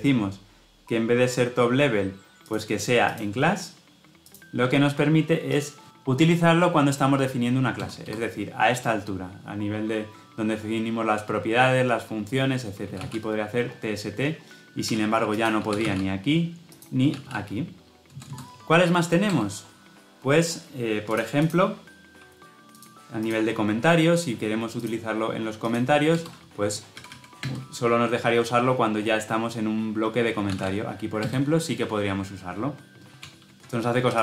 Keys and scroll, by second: 14.7 Escape, 17.9 ctrl+z, 33.1 ctrl+shift+z.